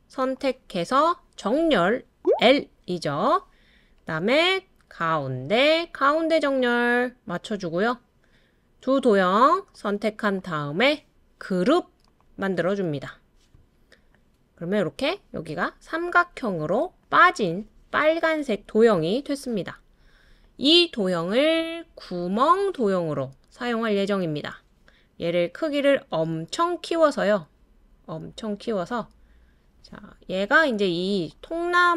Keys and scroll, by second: 2.2 l, 2.4 l.